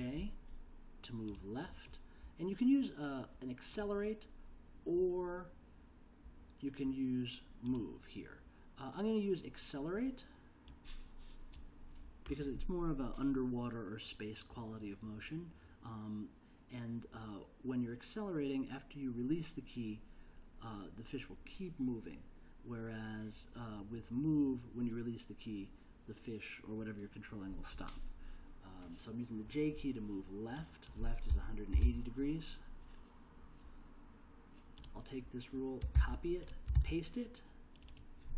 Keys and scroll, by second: 31.1-32.3 typing, 35.9 super+c, 36.7 super+v.